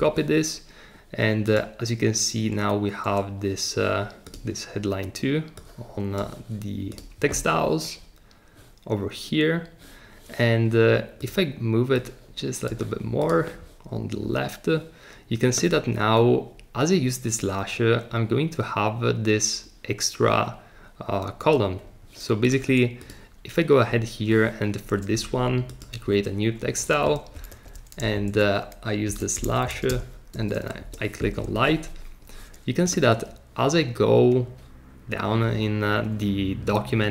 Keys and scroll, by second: 27.5 super+v, 28.1 alt+shift+Left, 28.8-30.3 typing, 30.8 Return.